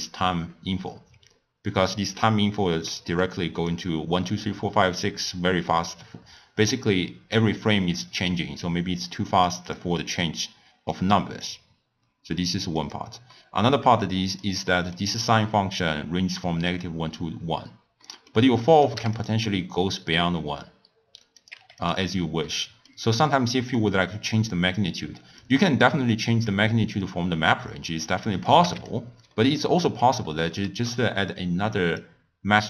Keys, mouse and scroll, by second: 2.9-3.7 middle drag, 3.7 click, 9.6 drag, 10.1 click, 10.9 click, 12.8 click, 13.3 middle click, 14.0 click, 14.7-17.7 middle drag, 18.0-18.7 middle drag, 18.7 click, 21.4-21.9 drag, 22.5-23.2 middle drag, 23.2 click, 25.4 click, 26.4-28.9 drag, 29.4-30.0 middle drag, 30.0 click, 30.8 shift+d.